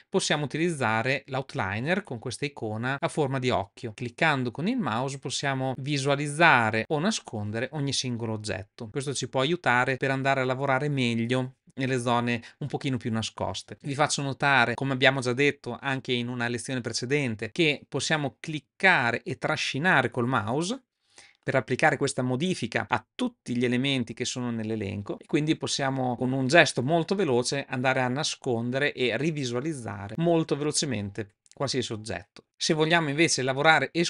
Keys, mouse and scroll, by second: 3.9 click, 4.5 click, 5.2 click, 6.1 click, 6.8 click, 18.7 click, 25.9 click.